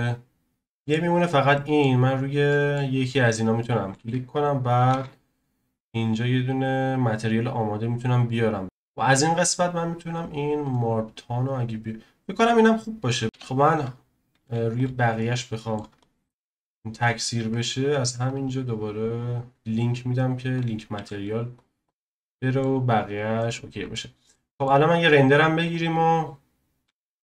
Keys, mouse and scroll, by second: 0.5 scroll down 1, 0.7-1.2 middle drag, 1.2 click, 1.5-2.0 shift+middle drag, 2.0-2.5 scroll up 2, 2.5-3.2 middle drag, 3.2 click, 3.7-7.4 shift+middle drag, 8.2 shift+a, 11.5-12.0 scroll up 1, 12.0-12.4 scroll down 4, 12.7-13.2 scroll up 1, 13.2-13.9 scroll up 2, 13.3 KP_1, 13.9-14.5 scroll down 1, 14.8 z, 15.2-16.9 shift+middle drag, 16.9 click, 20.6-21.6 drag, 21.6 z, 21.8 click, 22.2-22.8 middle drag, 22.8-23.4 scroll down 1, 23.4-25.7 middle drag, 25.7 z.